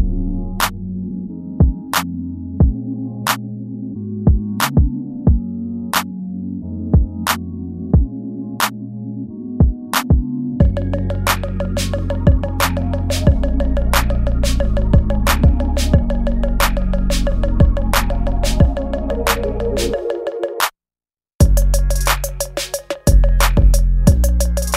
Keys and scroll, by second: 6.1 ctrl+z, 9.3 ctrl+s, 15.3 ctrl+s, 15.9 space, 17.2 ctrl+z, 18.4 ctrl+z, 20.8 space, 24.3 space.